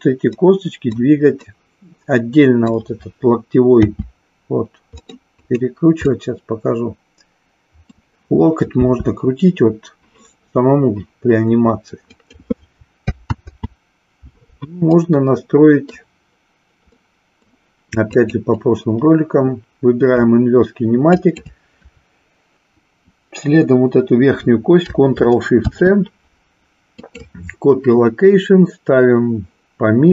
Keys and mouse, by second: 1.5-2.9 middle drag, 5.1 middle click, 5.6 click, 6.1-8.0 middle drag, 8.7 r, 12.2 click, 13.3 ctrl+z, 14.8-16.0 middle drag, 17.0-17.6 middle drag, 18.0-19.4 drag, 21.1 shift+click, 25.5 ctrl+shift+c.